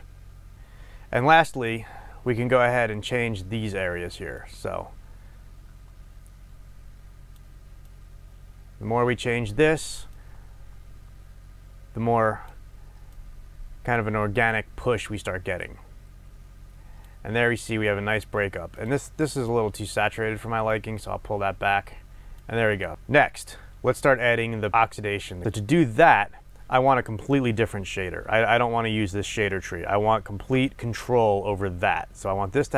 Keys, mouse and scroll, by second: 0.5-4.3 middle drag, 3.4-4.2 scroll up 2, 4.2 scroll up 1, 4.3-19.0 drag, 19.3 click, 22.7 click, 22.9-32.7 middle drag, 22.9-24.7 scroll down 2.